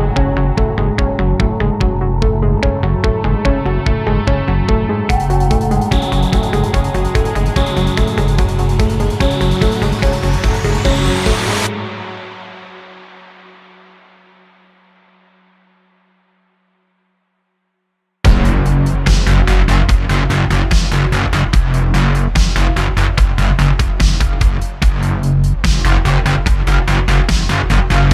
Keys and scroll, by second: 3.4 super+s, 3.8 shift+a, 4.6 s, 4.9 s, 6.1 s, 7.8 ., 9.7 shift+d, 10.8 super+z, 11.0 super+z, 13.3 shift+d, 13.5 x, 19.5 shift+d, 19.6 x, 20.2 s, 20.3 t, 23.5 super+s, 25.2 shift+a, 26.1 shift+a, 26.7 s.